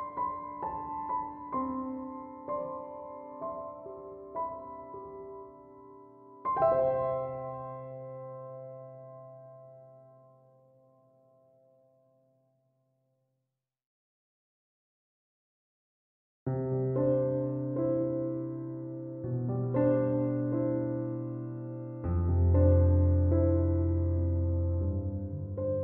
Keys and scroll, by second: 10.9 ctrl+7, 23.4 ctrl+7.